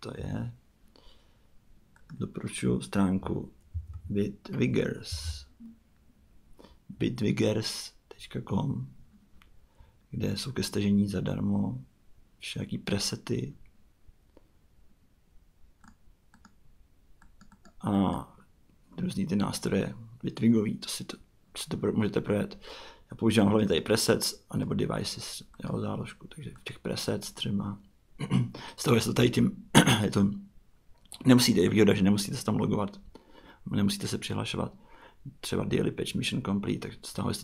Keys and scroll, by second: 0.2 super+Tab, 3.2-4.2 typing, 5.1 Return.